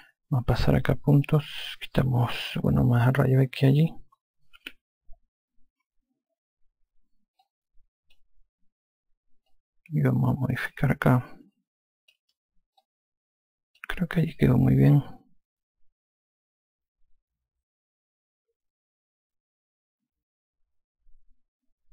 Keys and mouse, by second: 1.5 click, 5.0 e, 7.0 5, 7.8 click, 9.9 click, 13.2 click.